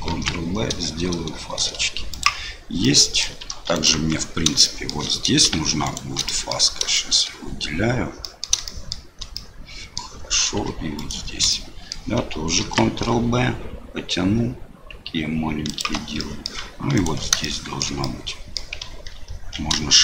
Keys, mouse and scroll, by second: 0.1 ctrl+b, 2.9 click, 3.7 alt+click, 4.6 shift+middle click, 5.8 alt+shift+click, 6.3 middle click, 6.9 shift+middle click, 8.2 middle click, 8.6 shift+middle click, 9.4 middle click, 11.0 alt+shift+click, 11.5 middle click, 12.6 ctrl+b, 16.3 click, 16.9 alt+click, 17.4 shift+middle click, 18.0 middle click.